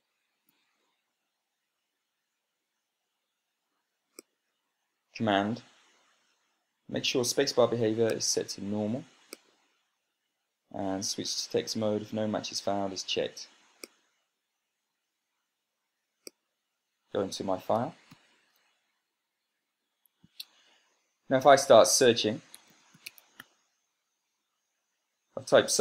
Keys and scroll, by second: 0.5 super+space, 18.6 ctrl+p, 23.2-24.5 typing.